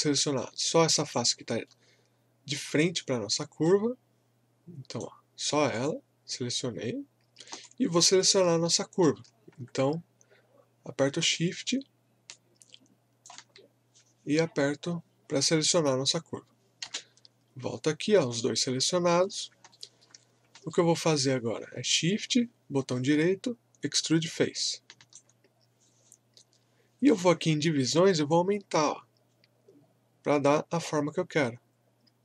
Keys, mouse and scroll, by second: 0.3 scroll down 1, 0.7 alt+right click, 1.4 alt+middle click, 3.6-5.7 right drag, 5.7 click, 7.1-7.4 scroll down 1, 7.6 alt+click, 8.4 scroll up 1, 8.6 alt+middle click, 9.4 scroll down 2, 10.1 scroll up 1, 12.3-15.9 shift+drag, 16.8 space, 17.7-18.1 scroll down 1, 18.3-18.7 scroll up 1, 19.7 alt+middle click, 20.3 scroll up 1, 20.7 alt+middle click, 22.1-27.6 shift+right drag, 28.3-32.2 drag.